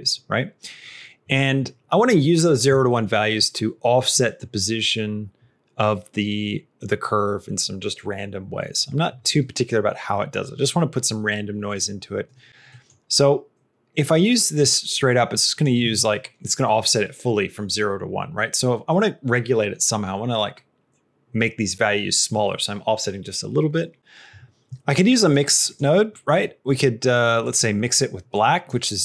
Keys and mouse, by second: 12.7 middle click, 15.0 click, 25.2 click, 25.5 click.